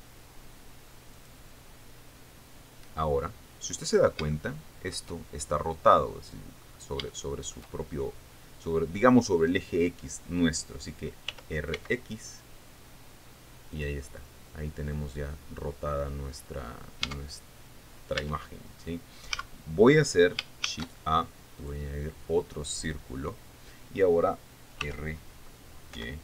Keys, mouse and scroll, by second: 1.8 click, 2.6-3.0 scroll down 4, 4.6 scroll down 3, 4.9 shift+middle click, 7.2-7.6 scroll up 2, 7.7 shift+middle click, 8.4-9.0 shift+scroll up 4, 11.9 r, 12.4 x, 14.3 click, 15.2-15.6 scroll down 2, 15.8-16.4 scroll up 2, 16.8-17.1 scroll down 2, 17.7 Tab, 18.8 Tab, 19.9 a, 21.2 shift+a, 22.2 click, 25.4 r.